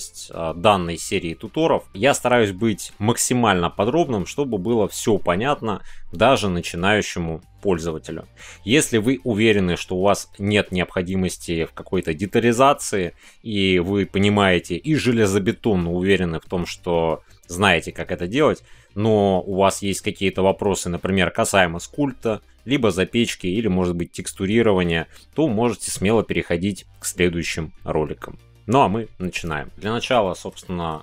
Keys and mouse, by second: 29.8 shift+middle click, 30.2 middle click, 30.6 shift+middle click.